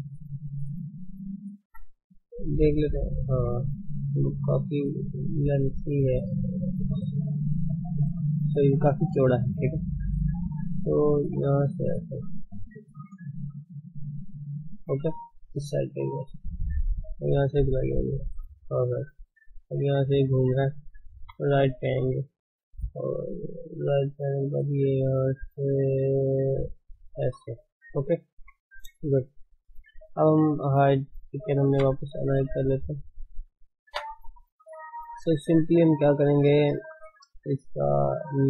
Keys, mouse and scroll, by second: 0.8 d, 2.5 shift+z, 3.3 shift+z, 5.0-6.4 drag, 6.4 d, 7.2 right click, 7.8 d, 8.5 click, 9.3 d, 10.3-11.8 drag, 11.8 d, 12.5 click, 13.3 d, 13.8-15.0 drag, 15.0 d, 16.7-17.8 drag, 17.8 d, 21.1 KP_3, 24.0-27.0 drag, 28.3 KP_1, 29.3 shift+middle click, 29.9 alt+h, 30.5 click, 30.9-31.3 scroll down 2, 31.3 click, 33.0 scroll up 2, 33.8 Tab, 35.0 shift+z, 36.8 shift+z, 37.5 ctrl+space.